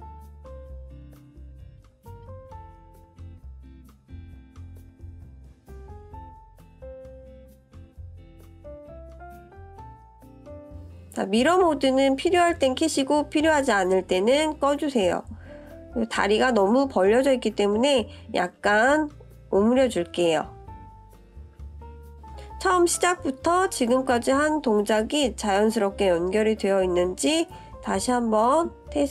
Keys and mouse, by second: 2.5-4.5 middle drag, 5.6 KP_1, 8.1 click, 9.2 shift+click, 10.6 click, 11.7 click, 12.7 ctrl+z, 13.9 click, 15.3-17.0 drag, 19.5-21.0 middle drag, 21.6 ctrl+KP_3, 24.1-27.3 drag, 27.9 click.